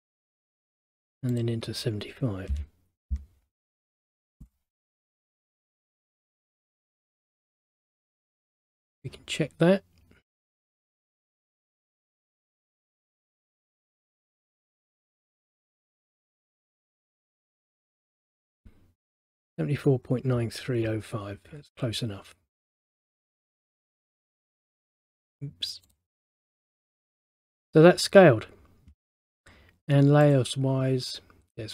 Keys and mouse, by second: 1.4 click, 8.3 middle click, 10.6 click, 11.6 click, 14.7 click, 15.4 middle click, 17.4 click, 23.3 middle click, 26.0 click, 27.0 middle click, 30.3 click.